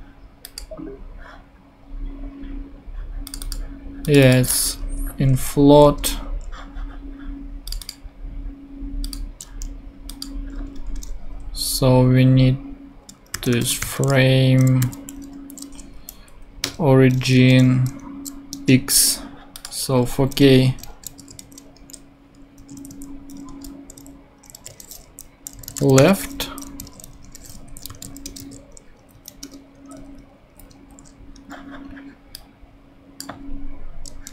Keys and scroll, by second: 5.6 ctrl+super+Left, 13.1-14.3 typing, 16.6 Return, 17.3 ., 18.5 Return, 20.6 ', 21.2 BackSpace, 21.4 shift+\, 22.6 Right, 23.4 shift+2, 23.9 shift+', 25.0 shift+Left, 25.3-26.2 typing, 26.3 super+t, 26.4 super+Right, 26.8 super+;, 27.5 shift+super+;, 27.6 shift+super+Left, 27.9 shift+super+c, 28.0 super+Right, 28.2 super+Return, 28.4 super+v, 29.0 super+Up, 29.4 Return, 29.8 Right, 30.5 Down, 30.7 super+Right.